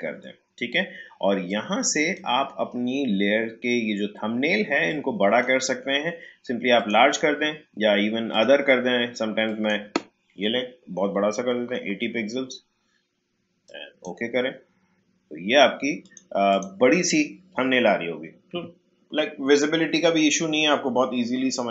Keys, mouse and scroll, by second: 4.8-6.8 drag, 11.3-12.2 typing, 13.6-16.0 drag.